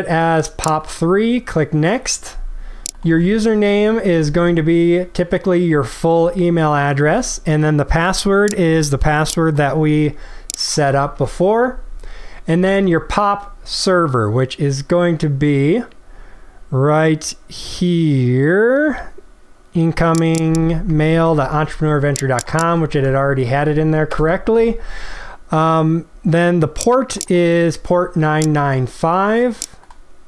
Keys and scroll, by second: 3.6 ctrl+v, 11.1 ctrl+v, 21.0 ctrl+c, 22.9 ctrl+v.